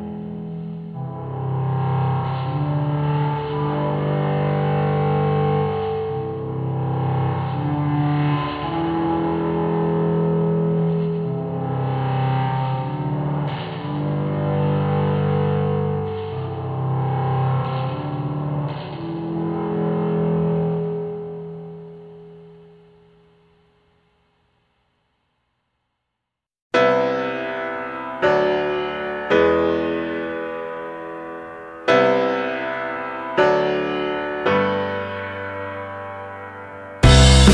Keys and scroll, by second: 15.8 Delete, 22.4 Down, 22.8 Right, 22.9 Down, 31.7 ctrl+c, 31.8 ctrl+v, 37.3 ctrl+z.